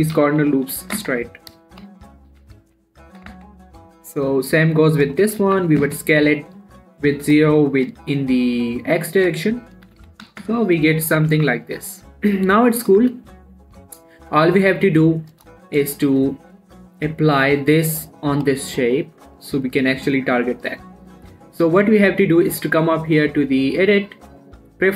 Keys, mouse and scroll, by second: 0.5-0.9 typing, 2.1 ctrl+z, 2.7 s, 3.0 y, 4.9 click, 5.0 click, 5.6 s, 5.8 x, 7.3-10.2 drag, 10.2 s, 10.4 x, 11.5 z, 11.7 Tab, 11.9 scroll down 1, 12.0 middle click, 13.3 click, 13.5 shift+middle click, 14.0 middle click, 15.7 click, 15.9 shift+middle click, 16.5 click, 18.5 g, 18.9 right click, 19.1 click, 23.1 click.